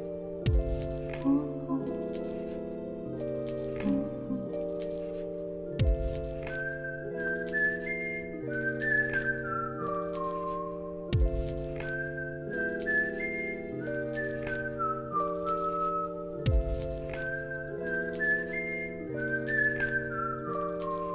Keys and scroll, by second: 0.2 t, 2.9 ctrl+s, 17.0 1, 17.6 0, 17.9 Return, 19.7 ctrl+s, 20.4 alt+x.